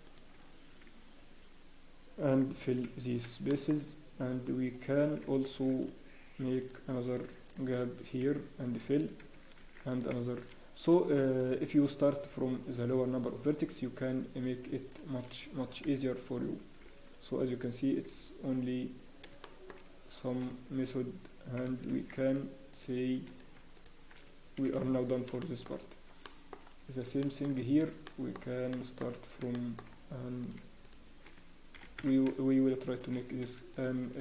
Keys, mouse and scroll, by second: 0.0 shift+click, 2.2 f, 3.5 shift+middle click, 3.8 scroll, 5.5 ctrl+r, 5.5 scroll up 1, 7.0 click, 8.2 f, 8.8 scroll, 9.1-9.9 scroll down 2, 10.8 click, 10.8-11.2 scroll up 1, 11.4 shift+click, 11.4 scroll up 1, 12.2 scroll, 15.1 scroll down 1, 15.4 scroll, 15.8 scroll up 1, 15.8 f, 16.7 d, 18.0-18.8 scroll up 1, 18.0 f, 19.8-20.4 scroll, 21.6 shift+scroll, 23.5 click, 24.5 f, 25.0 scroll, 25.4 shift+middle click, 25.4 scroll down 1, 26.1 scroll down 3, 26.2 shift+middle click, 26.2 scroll up 2, 26.8 scroll down 1, 27.2 shift+middle click, 27.2-27.5 scroll up 3, 28.0 shift+middle click, 28.8 shift+middle click, 29.1 scroll, 29.5 shift+middle click, 29.5 scroll up 4, 30.4 click, 30.8 shift+click, 30.8 scroll up 1, 31.7 g, 33.7 click.